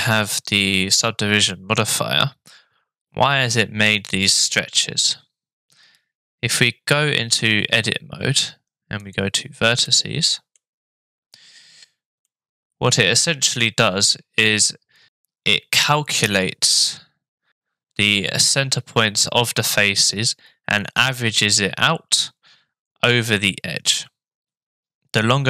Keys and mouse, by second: 7.3 Tab, 9.0 click, 9.8 shift+middle click, 12.3-13.6 middle drag, 23.9 middle click.